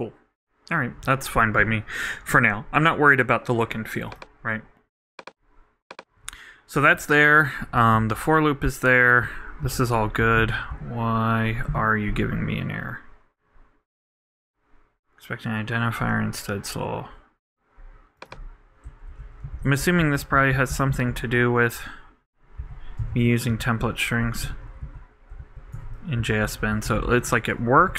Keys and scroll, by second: 7.9 super+Up, 8.0 super+Right, 9.6 super+Left, 10.2 super+Up, 10.4 super+Right, 19.1 super+Right, 19.5 super+Left, 20.0 alt+Right, 23.2 shift+BackSpace, 23.5 shift+', 24.2 shift+Delete, 24.5 super+Right, 24.8 super+Left, 25.9 shift+BackSpace, 26.2 shift+', 26.7 shift+super+Left, 27.3 super+Left.